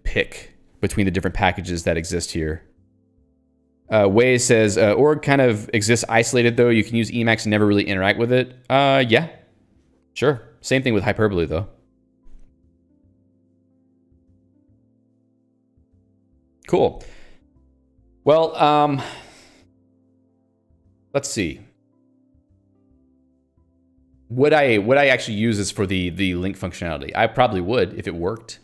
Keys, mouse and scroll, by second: 14.3 click, 14.5 Escape, 15.1 ctrl+g, 16.0 ctrl+d.